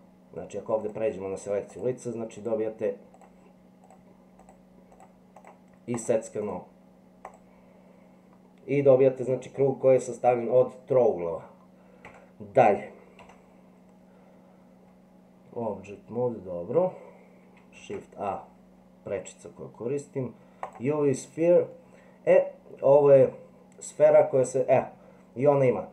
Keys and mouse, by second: 0.8 click, 2.4 click, 5.4 click, 5.9 click, 6.4 click, 7.3 click, 12.1 Tab, 13.2 Delete, 17.8 shift+a, 21.9-23.3 middle drag.